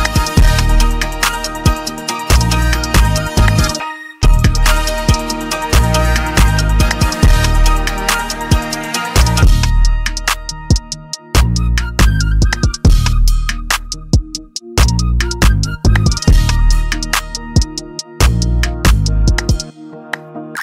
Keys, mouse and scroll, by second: 2.4 Caps_Lock, 2.4 click, 6.7-7.4 typing, 6.9 click, 9.0-10.5 typing, 9.3 click, 10.3 click, 10.5 right click, 11.5 click, 13.6 F8, 14.8 Return, 17.0 F12, 18.1-18.8 typing, 20.5-20.6 typing.